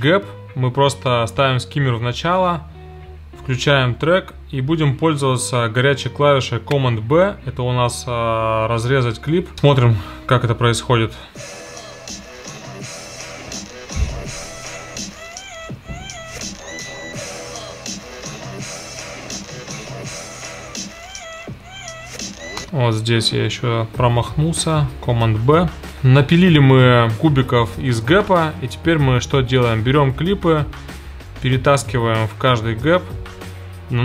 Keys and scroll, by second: 20.6 super+b, 22.6 space, 24.6 super+b.